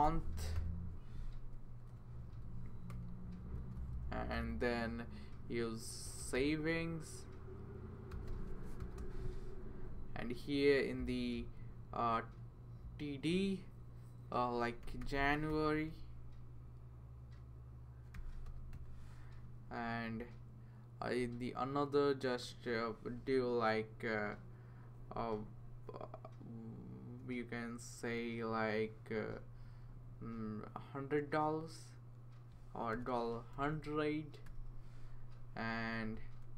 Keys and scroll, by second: 0.0-1.0 typing, 1.7 Left, 1.9 Left, 2.6-3.4 typing, 3.6 Left, 5.8-6.8 typing, 7.9-9.5 typing, 14.6-16.0 typing, 17.9-18.7 typing, 19.7 Down, 20.2 Down, 21.2 Down, 32.9-35.0 typing, 35.7 Down, 35.9 Down, 36.0 Down.